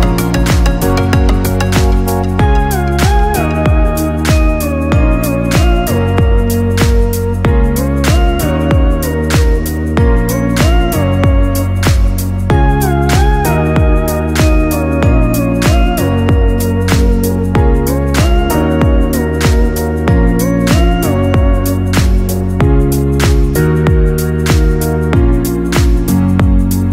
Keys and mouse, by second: 0.9 n, 2.0 middle click, 2.7 KP_3, 3.4 shift+middle click, 3.9 Tab, 4.3-4.7 middle drag, 5.4 alt+z, 6.2 Tab, 7.3 g, 10.4 Tab, 11.0-11.4 middle drag, 11.5 KP_3, 12.2 right click, 12.7 Tab, 13.1 right click, 13.3 KP_1, 13.8 g, 15.4 KP_3, 16.0 right click, 16.3 g, 17.7 right click, 18.0 g, 18.6 KP_1, 19.3 shift+middle click, 19.9 KP_3, 20.6 shift+middle click, 21.7 c, 23.7 c, 24.6 g.